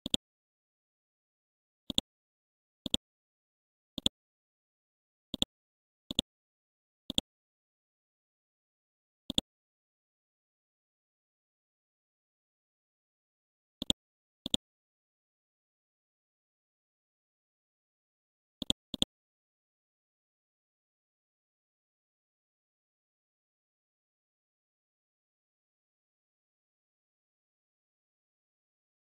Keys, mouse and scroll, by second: 0.1 click, 1.9 shift+click, 2.9-9.3 drag, 9.7 scroll up 1, 10.4 scroll down 1, 12.2 scroll up 1, 13.8-15.7 drag.